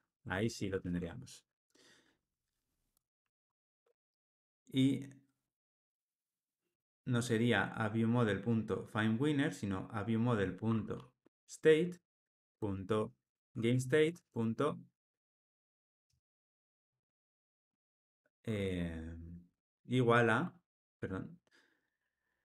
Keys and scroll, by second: 0.3 Tab, 0.7 ctrl+alt+o, 3.6 alt+Return, 12.0 Return.